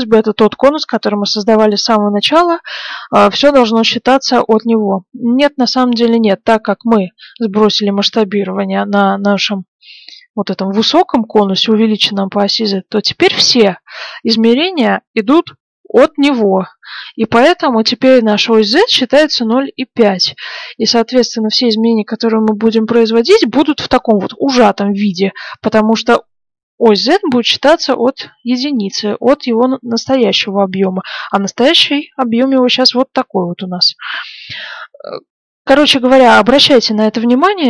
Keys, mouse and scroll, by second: 3.1-5.6 middle drag, 9.3 middle click, 10.9 middle click, 13.4-15.3 middle drag, 20.0 middle click, 20.8-21.8 middle drag, 30.4-32.4 drag, 32.5-36.2 middle drag.